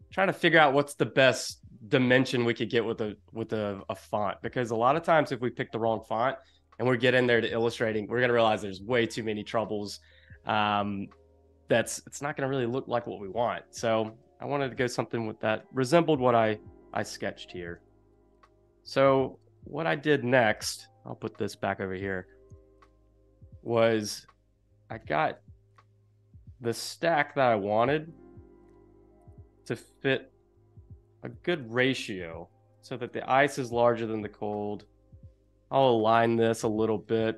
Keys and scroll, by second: 14.5 space, 17.1 space, 18.9 space, 29.2 space, 30.0 super+=, 30.3 space.